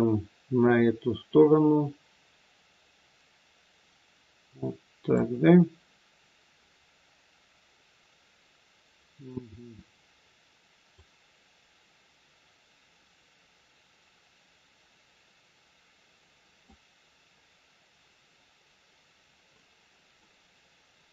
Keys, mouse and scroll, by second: 6.6 scroll up 2, 10.9 click, 19.0-20.1 scroll down 1, 20.1 middle click.